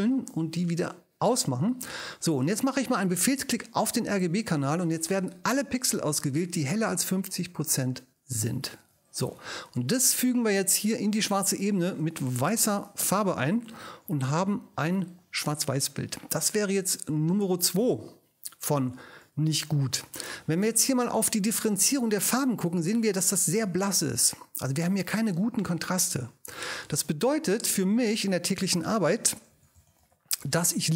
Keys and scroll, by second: 12.5 super+BackSpace, 14.7 super+d, 28.9 ctrl+super+i, 29.5 ctrl+super+r, 29.7 g, 30.0 b, 30.6 Return.